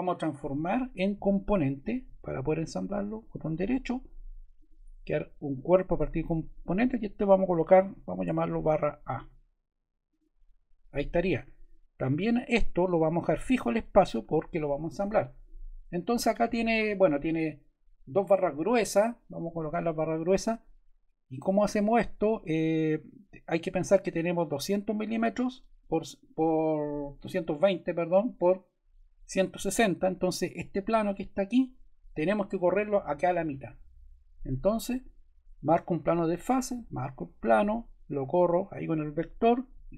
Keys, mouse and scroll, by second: 0.3 click, 1.4 click, 2.5 click, 4.5 click, 5.9 click, 6.4 click, 7.7-8.9 typing, 36.0-37.2 drag, 37.3 click.